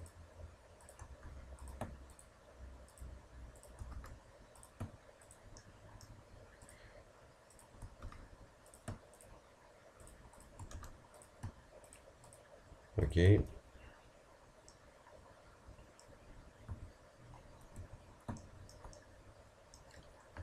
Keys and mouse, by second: 1.2 f, 3.9 f, 8.1 f, 10.8 f, 14.7 middle click, 14.8 click, 14.9 middle click, 16.7 a, 17.8 Tab.